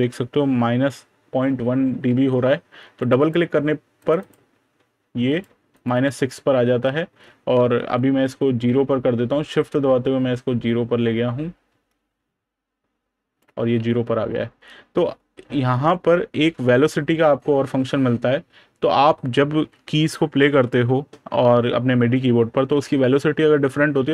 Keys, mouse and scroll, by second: 6.1 click, 16.2 super+KP_Add.